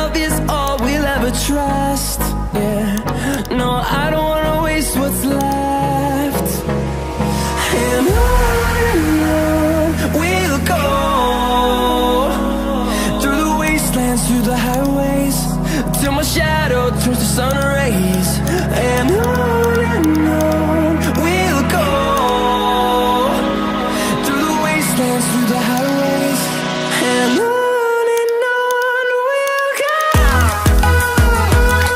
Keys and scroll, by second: 4.3 Return.